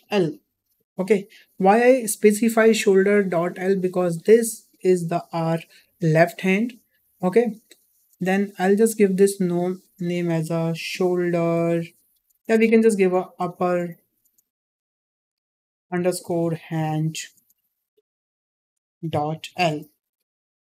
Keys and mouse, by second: 8.2 click, 9.2 click, 12.6 BackSpace, 12.7 BackSpace, 14.1 p.